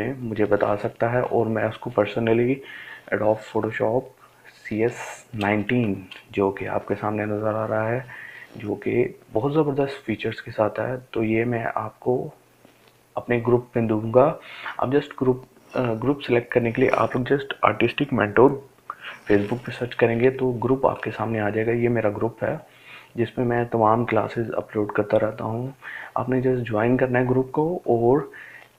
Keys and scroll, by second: 6.2 ctrl+space.